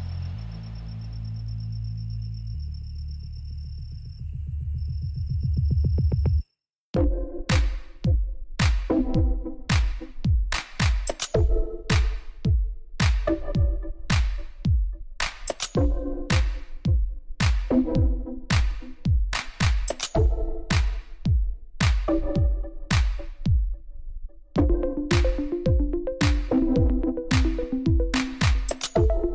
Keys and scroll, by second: 1.3 g, 1.4 y, 1.9 x, 6.3 g, 6.5 x, 7.3 Escape, 9.8 g, 9.9 x, 11.8 alt+a, 17.5 \.